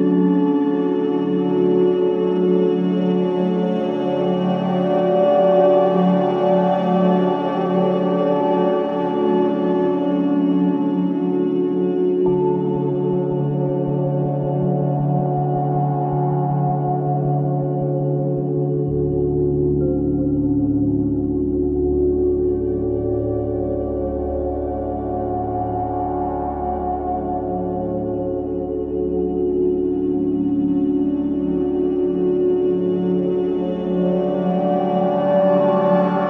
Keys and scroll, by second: 2.6 space, 7.5 space, 10.0 space, 13.6 space, 18.6 space, 24.1 space, 31.3 space.